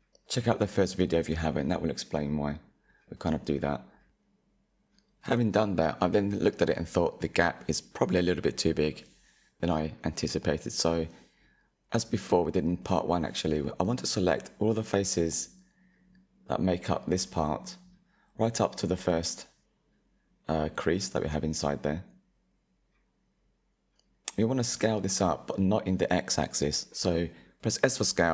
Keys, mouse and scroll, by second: 0.1 shift+middle click, 0.6-1.6 middle drag, 1.6 click, 2.2 click, 2.5-3.9 middle drag, 3.9 click, 4.9-6.2 scroll up 3, 6.2-8.7 middle drag, 8.9 middle click, 10.3 Tab, 10.7 middle click, 11.2-12.7 scroll up 3, 12.7 click, 14.1 click, 15.8 ctrl+KP_Add, 16.3 ctrl+KP_Add, 17.3 middle click, 17.9-19.2 scroll up 2, 19.2 ctrl+KP_Add, 20.2-22.5 middle drag, 22.5 ctrl+KP_Add, 23.7-24.1 scroll down 2, 24.3 middle click, 25.1-26.5 middle drag, 26.5 s.